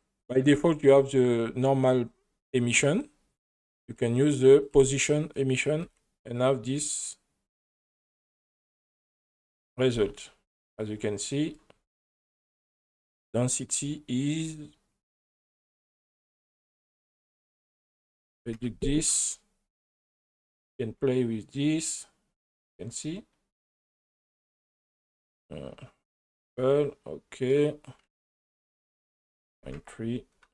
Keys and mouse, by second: 3.8-4.8 drag, 5.8 space, 10.0 space, 10.3 middle click, 13.4 click, 15.9 drag, 17.3-18.7 drag, 20.4-24.2 drag, 25.0-26.3 drag, 26.5 middle click, 28.6-29.8 drag.